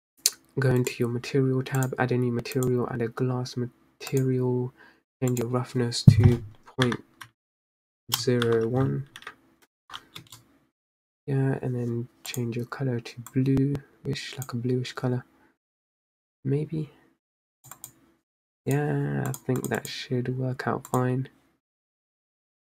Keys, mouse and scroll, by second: 1.4 click, 2.0-10.3 drag, 12.6-13.0 drag, 18.4 click, 18.7 click, 19.2 click, 19.9 click, 21.6 click.